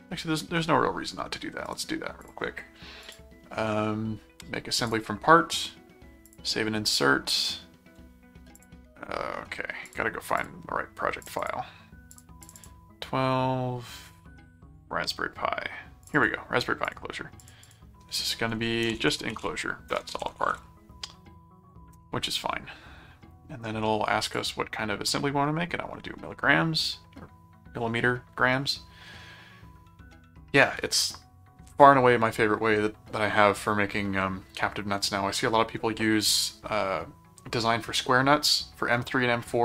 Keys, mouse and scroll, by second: 1.6 right click, 2.2 click, 3.0 click, 4.8 click, 6.3 click, 8.6 click, 9.8 click, 11.2 click, 12.1 click, 16.0 click, 16.8 click, 18.8-21.0 typing, 21.9 Return, 24.3 click.